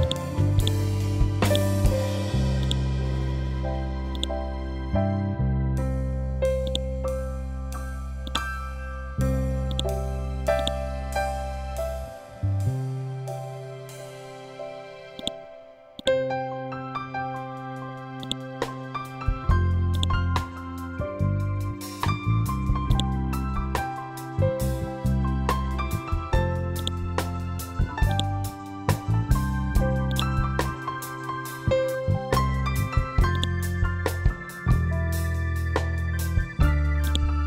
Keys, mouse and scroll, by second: 11.9 scroll up 1, 15.1-26.0 drag, 26.7-30.0 drag, 37.0 ctrl+click.